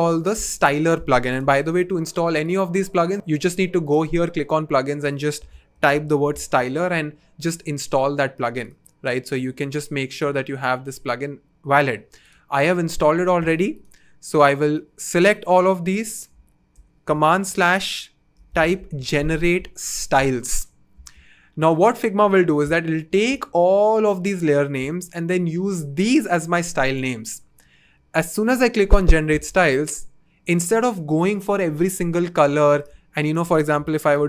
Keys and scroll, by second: 5.1-6.9 typing, 17.2 super+/, 18.1-19.3 typing, 33.7 r.